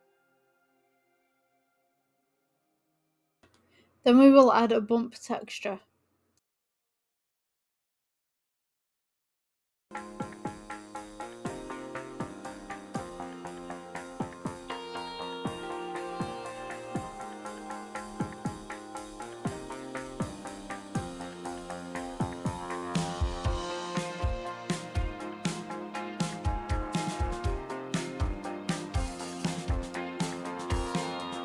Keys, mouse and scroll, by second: 2.0-8.0 drag, 12.8-14.5 scroll up 18, 14.5-15.5 middle drag, 15.5-16.7 scroll down 16, 16.7-17.9 scroll up 4, 17.9-19.4 scroll up 1, 19.7 click, 20.6-23.4 drag, 23.4 ctrl+z, 24.6 ctrl+z, 25.8 ctrl+z, 26.1 ctrl+z, 26.5 ctrl+z.